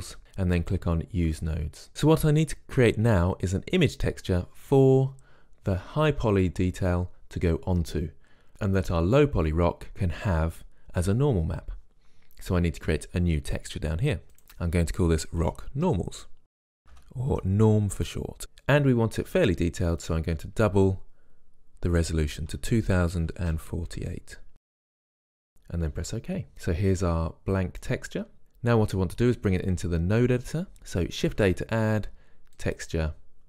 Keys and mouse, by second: 1.6 click, 14.4 click, 26.5-30.7 middle drag, 30.7 click, 31.6 shift+a.